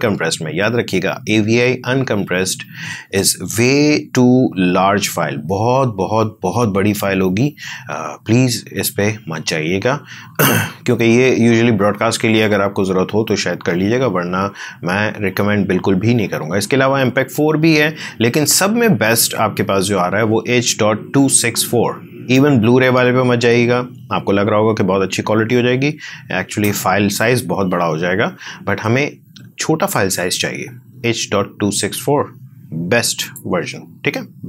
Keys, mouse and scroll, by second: 33.1 shift+click.